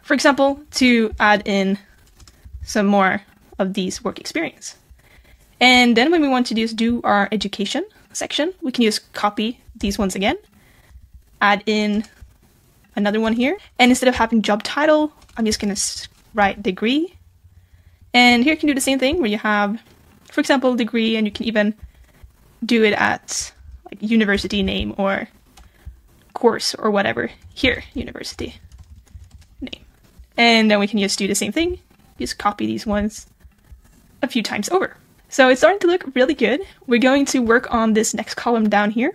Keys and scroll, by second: 2.5 super+v, 9.8 super+c, 10.9 super+v, 23.6 super+c, 24.6 super+v, 31.7 super+c, 32.2 super+v.